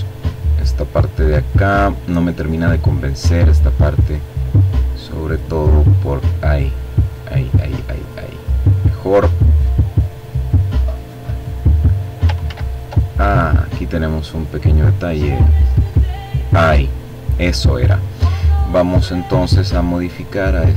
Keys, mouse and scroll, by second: 0.9 click, 2.4-6.3 drag, 6.7 click, 7.3 click, 8.3 click, 10.8 ctrl+z, 11.5 ctrl+click, 13.4-14.7 drag, 18.3-19.6 drag, 19.7-20.7 drag.